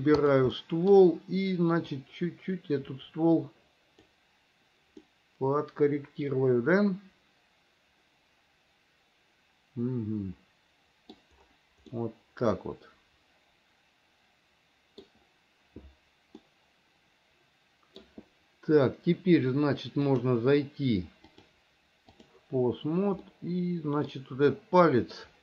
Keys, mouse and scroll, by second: 0.4 click, 0.8 middle click, 2.3-4.3 drag, 5.2-9.2 scroll up 1, 9.2-11.4 middle drag, 12.1-15.3 middle drag, 16.7-18.2 scroll up 1, 21.5-22.5 drag, 23.5 middle click.